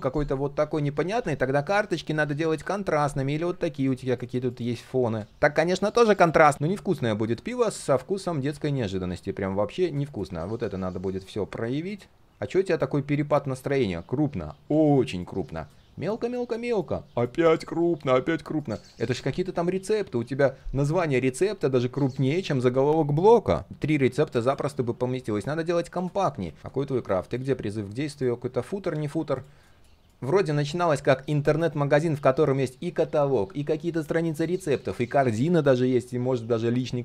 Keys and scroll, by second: 7.8 ctrl+z, 11.7 ctrl+shift+3, 23.7 ctrl+d, 26.2 ctrl+z, 26.4 ctrl+z.